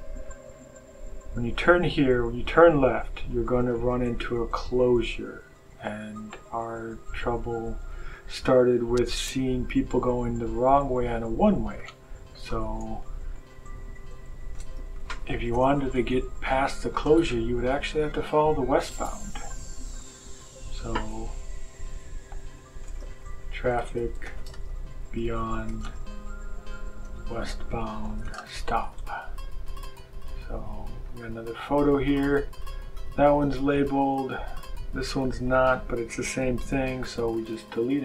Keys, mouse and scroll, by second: 0.2 click, 3.5 click, 5.7 click, 8.0 click, 11.7 click, 12.7 BackSpace, 14.6-17.6 typing, 19.9 click, 21.0 BackSpace, 22.8-29.2 typing, 31.0 click, 33.6 click, 37.2 click.